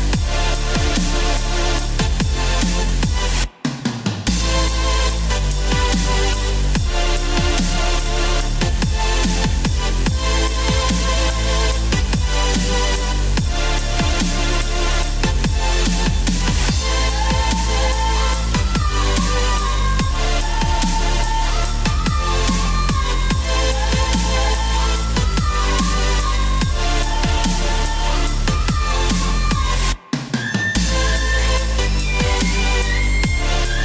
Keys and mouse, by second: 1.4 KP_5, 2.1 KP_Decimal, 2.5 KP_6, 2.7 KP_5, 3.3 Return, 5.2 click, 7.5 KP_5, 8.3 KP_Decimal, 8.5 KP_6, 8.7 KP_5, 9.1 Return, 10.8 click, 15.2 KP_6, 15.7 Return, 16.9 click, 17.8 KP_8, 18.6 KP_8, 19.3 KP_2, 19.6 KP_2, 21.1 KP_Add, 21.4 KP_Add, 33.3 click.